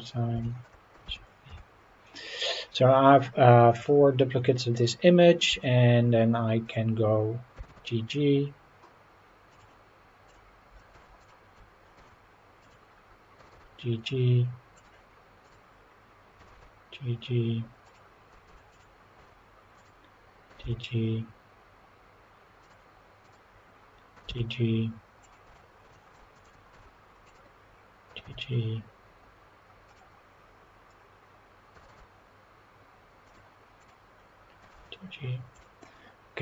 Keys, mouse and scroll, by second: 0.1 scroll down 1, 0.4 shift+middle click, 1.0 shift+d, 1.5 y, 2.4 click, 3.7 click, 4.3 scroll down 2, 4.7 scroll up 2, 5.5 Tab, 6.6 click, 7.6 g, 7.8 g, 9.5 click, 10.3 click, 10.9 Tab, 11.2 click, 12.0 Tab, 12.6 click, 13.4 g, 14.7 click, 16.4 g, 17.9 click, 18.5 Tab, 18.7 click, 19.2 Tab, 19.8 click, 20.5 g, 22.6 click, 23.2 click, 24.2 g, 25.2 click, 25.4 Tab, 25.9 shift+middle click, 26.3 click, 26.7 Tab, 27.3 click, 28.1 g, 29.9 click, 31.7 g, 33.3 click, 33.8 click, 34.6 g, 35.5 click, 35.8-36.4 scroll down 4.